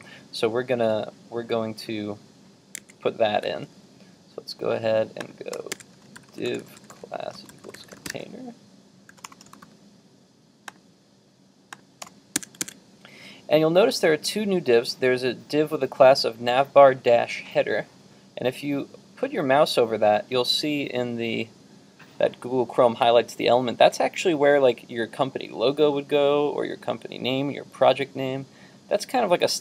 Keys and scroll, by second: 3.5 super+Tab, 12.6 super+Tab.